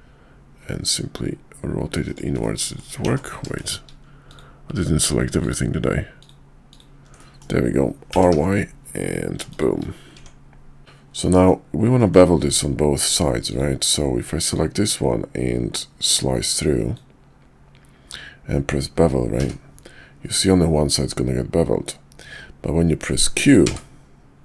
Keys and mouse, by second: 2.4 middle click, 3.0 ctrl+z, 3.6 shift+middle click, 4.3 click, 5.0 click, 5.4 click, 6.2 ctrl+click, 6.7 ctrl+click, 7.2 middle click, 8.1 r, 10.1 Tab, 10.8 x, 11.1-11.4 middle drag, 11.9 middle click, 13.5 click, 14.5-24.4 drag.